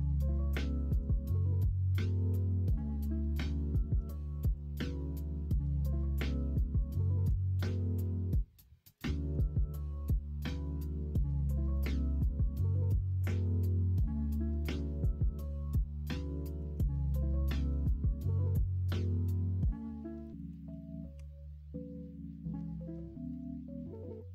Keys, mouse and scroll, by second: 2.4 middle click, 5.1 middle click, 7.8 ctrl+z, 10.8 shift+click, 11.9 x, 12.8 2, 13.8 middle click, 21.1 ctrl+e, 23.9 middle click.